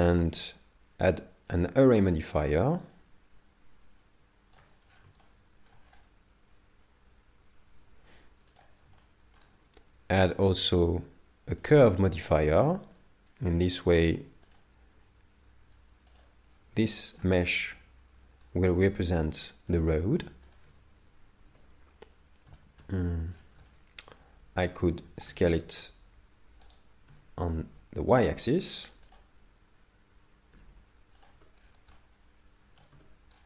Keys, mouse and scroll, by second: 2.9 shift+click, 4.9-5.2 scroll down 8, 5.2 shift+middle click, 5.9 scroll up 4, 8.6 click, 9.0 shift+middle click, 10.3 click, 13.3-13.7 scroll down 7, 14.5 click, 17.0 shift+middle click, 17.6 middle click, 20.2 middle click, 21.5 KP_7, 22.6 shift+middle click, 22.9 Tab, 23.5 scroll up 6, 23.7 shift+middle click, 25.0 scroll down 2, 25.3 s, 27.2 s, 30.6 g, 31.3 Tab, 31.6 scroll down 5, 32.1 shift+middle click, 32.9 Tab, 33.3 scroll up 4.